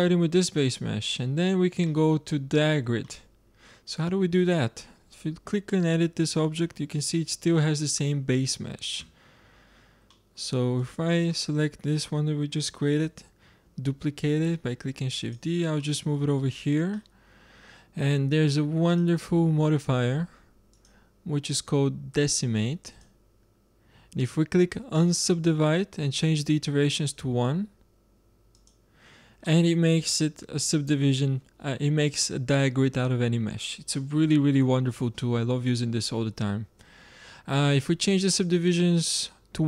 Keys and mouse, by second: 1.8 click, 1.8-3.4 middle drag, 3.6-4.0 middle drag, 4.2-4.8 middle drag, 4.8 Tab, 8.9 Tab, 11.2-12.4 drag, 12.4 middle click, 12.9 shift+d, 14.7-15.7 drag, 15.7-18.8 middle drag, 18.8-20.6 drag, 20.6-22.4 drag, 24.8-26.8 drag, 26.8-30.3 drag, 29.3-30.1 middle drag, 30.3 middle drag, 30.4 drag, 30.6-31.2 middle drag, 38.2-39.6 drag.